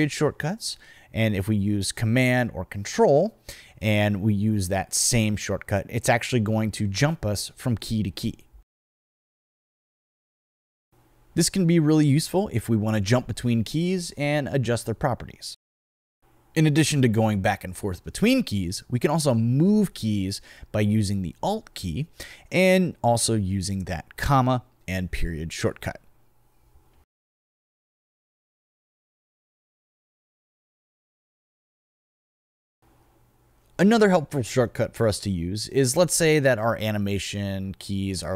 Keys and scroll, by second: 3.1 super+,, 7.3 super+., 9.2 super+,, 10.3 super+., 24.0 alt+,, 26.8 alt+., 30.5 alt+,.